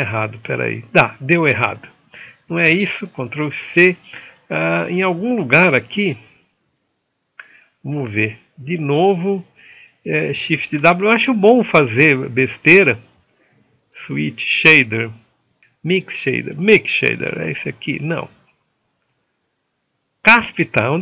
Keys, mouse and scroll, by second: 2.9 ctrl+z, 5.1 click, 5.8-16.6 right drag.